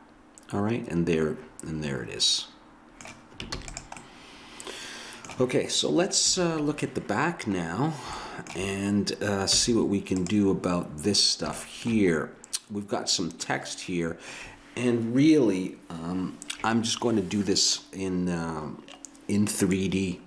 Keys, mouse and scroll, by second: 3.5 ctrl+s, 4.0-5.7 middle drag, 6.4 ctrl+KP_1, 8.5 middle click, 9.5 z.